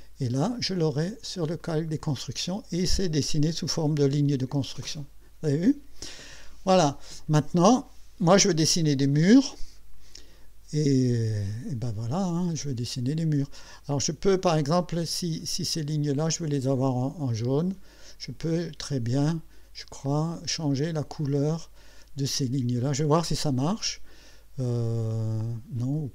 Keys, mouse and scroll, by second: 1.1 click, 1.6 click, 13.5 right click, 14.4 click, 15.7 click, 17.6 click, 19.2 click, 20.7 click, 23.2 click.